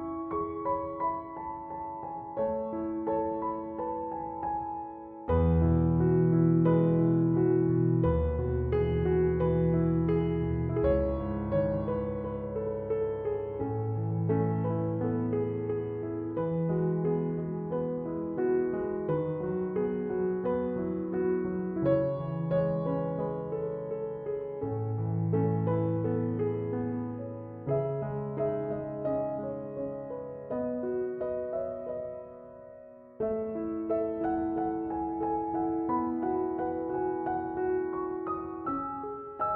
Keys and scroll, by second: 0.2 Escape, 5.8-6.8 typing, 11.7-12.6 typing, 18.0 1, 18.5 0, 20.7-22.3 typing, 22.5 Return, 28.6-30.3 typing.